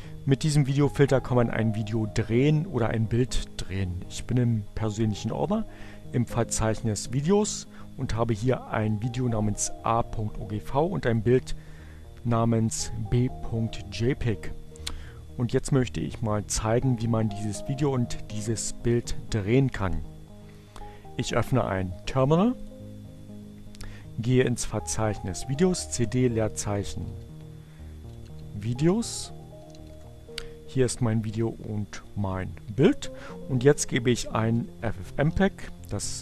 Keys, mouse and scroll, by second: 2.3 click, 8.0 click, 10.5 click, 14.7 click, 24.8 click, 25.4-29.7 typing, 30.7 click, 32.9-35.8 typing.